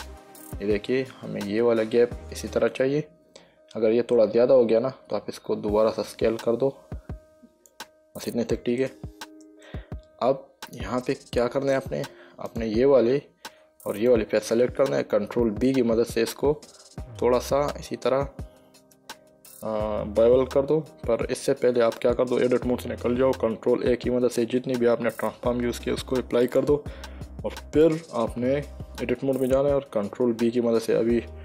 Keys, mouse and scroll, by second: 0.1 middle click, 5.8 s, 8.0 click, 9.2 middle click, 11.6 middle click, 12.8 click, 14.3 shift+click, 15.8 ctrl+b, 21.3 Escape, 22.3 Tab, 24.1 ctrl+a, 26.8 click, 28.1 Tab, 30.9 ctrl+b.